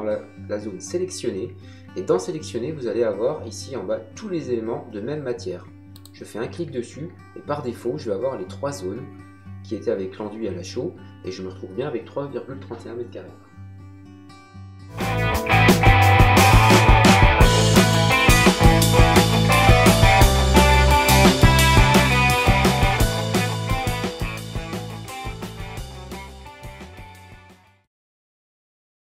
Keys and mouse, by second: 5.9 click.